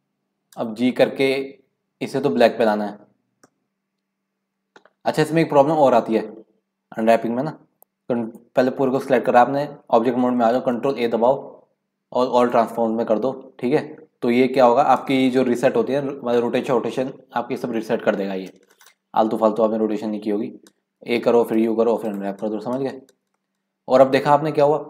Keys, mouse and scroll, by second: 0.5 g, 3.5 middle click, 7.2 Tab, 10.7 ctrl+a, 18.6 Tab, 20.1-21.0 scroll up 1, 21.0 a, 21.5 u, 22.7-23.1 scroll down 5, 23.1 scroll up 4, 23.3-24.8 middle drag.